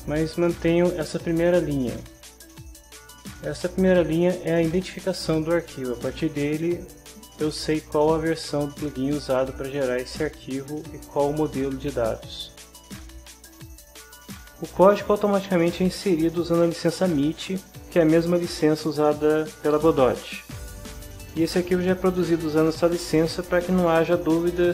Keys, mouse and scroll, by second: 0.5-2.0 drag, 14.1-15.1 drag.